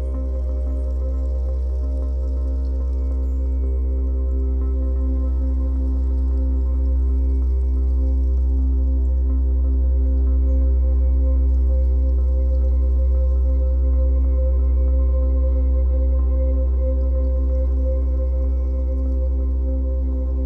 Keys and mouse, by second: 2.5 ctrl+-, 2.5-3.1 typing, 3.6 right click, 4.6 click, 5.6 typing, 5.8 ctrl+t, 8.4 Return, 10.4 click, 14.3 click.